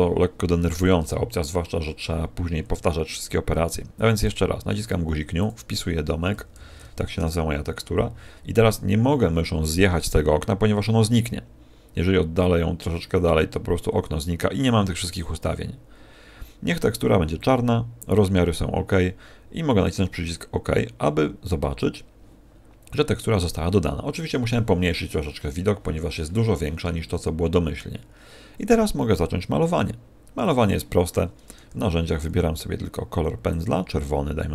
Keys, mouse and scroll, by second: 4.1 click, 22.5-24.2 scroll down 6, 25.2-26.2 scroll up 5, 26.2-27.0 scroll up 1, 27.1-29.0 scroll down 6, 30.4 click, 31.6 n, 32.2-33.4 scroll down 11, 33.4 click.